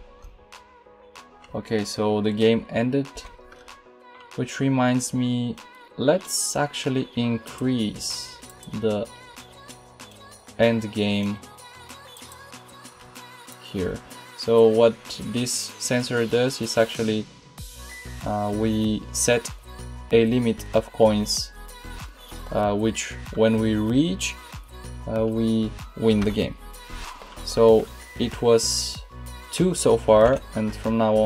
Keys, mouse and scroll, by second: 3.0 Escape.